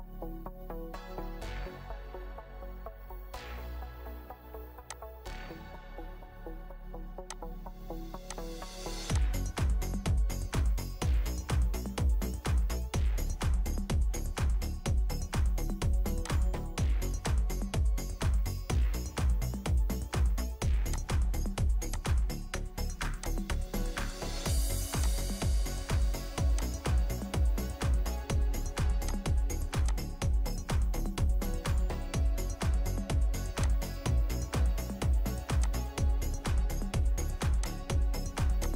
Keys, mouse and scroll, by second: 13.9-14.5 typing, 16.6 typing, 17.8 Escape, 20.1 Escape, 23.2 ctrl+click, 27.2 ctrl+click, 27.7 scroll down 1, 31.2 scroll up 1.